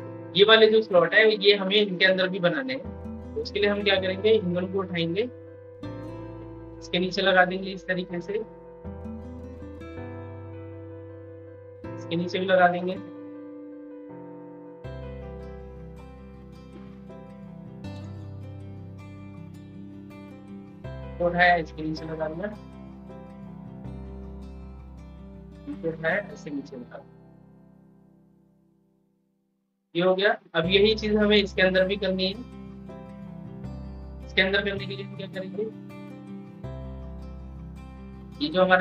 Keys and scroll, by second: 13.1 ctrl+z.